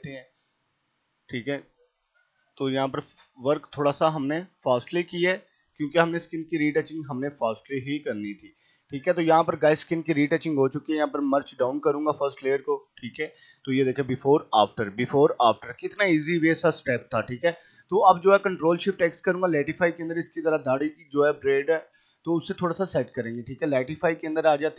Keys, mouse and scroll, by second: 2.8 ], 2.9-4.5 drag, 4.5 scroll up 1, 4.7 [, 5.1 click, 6.1 right click, 6.3 click, 8.5-10.4 scroll up 1, 10.9 right click, 12.1 click, 17.3 click, 22.2 click.